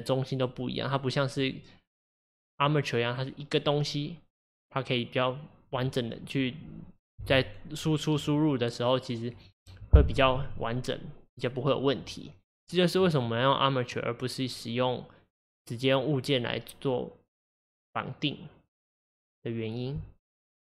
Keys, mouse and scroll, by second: 0.0 click, 1.5 click, 13.0-20.6 middle drag.